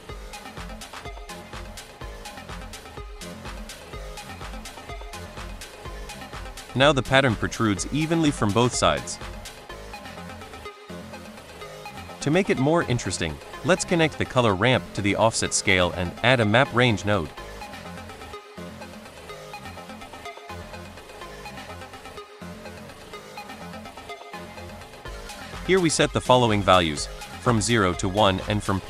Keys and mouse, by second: 3.1-4.7 drag, 6.5-7.0 middle drag, 7.6 shift+middle drag, 8.1-8.5 middle drag, 8.7 shift+middle drag, 9.6-10.1 middle drag, 11.1 middle drag, 12.0 middle click, 13.1 click, 15.5 middle click, 16.1 shift+a, 19.4 click, 19.7-20.8 drag, 21.6 middle click, 22.3 middle click, 22.9 middle click, 25.3-28.8 drag.